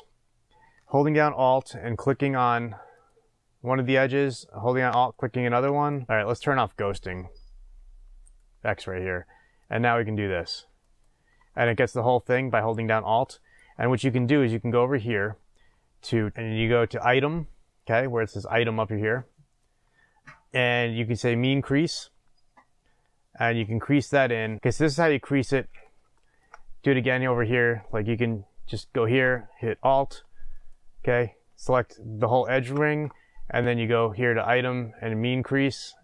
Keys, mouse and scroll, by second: 2.0 alt+click, 2.9 click, 4.9 alt+click, 5.7 click, 8.2 click, 9.6 click, 10.8 alt+click, 13.2-14.9 middle drag, 14.9-16.3 drag, 22.0-24.6 drag, 25.5 scroll down 2, 26.1 shift+middle click, 27.1 click, 28.3 scroll up 1, 28.5 scroll down 1, 28.7-30.5 shift+middle drag, 30.5 alt+click, 35.2-36.0 drag.